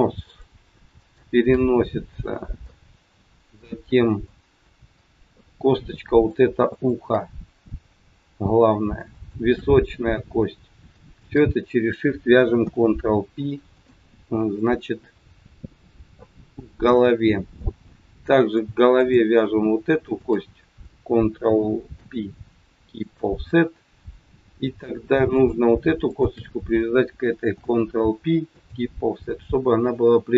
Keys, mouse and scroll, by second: 0.1 shift+click, 1.0 shift+click, 2.1 middle click, 3.5 middle click, 6.5 middle click, 6.8 shift+click, 9.1 shift+click, 11.2 shift+click, 12.6 ctrl+p, 17.6 middle click, 19.0 click, 20.0 shift+click, 21.9 ctrl+p, 25.3 click, 26.2 shift+click, 27.5 ctrl+p.